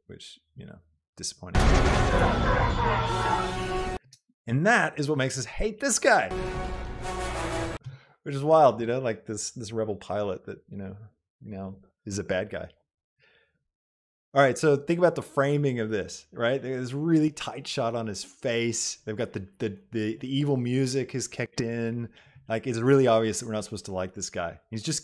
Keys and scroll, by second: 1.5 space, 4.1 space, 6.3 space.